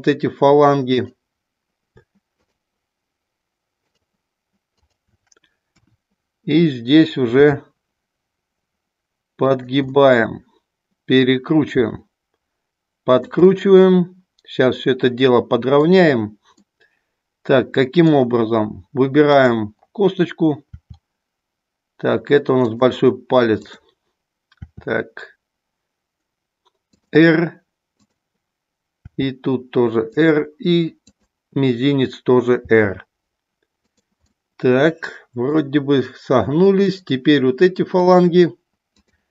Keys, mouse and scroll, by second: 2.5 shift+click, 3.8 shift+click, 4.9 shift+click, 5.8 KP_1, 7.3 r, 10.0-11.3 middle drag, 11.8 r, 13.6-15.9 middle drag, 16.7-18.2 middle drag, 19.3 click, 20.7 r, 24.6 r, 27.8 click, 29.1 r, 30.1 click, 32.7 r, 33.9 click, 34.3-35.5 middle drag, 38.1 shift+click, 38.9 shift+click.